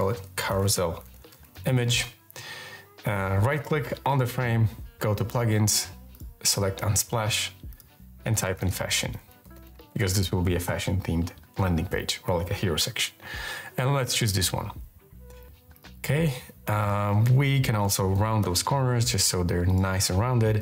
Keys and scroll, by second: 0.0-2.1 typing, 7.7-10.1 typing, 17.4-18.3 typing.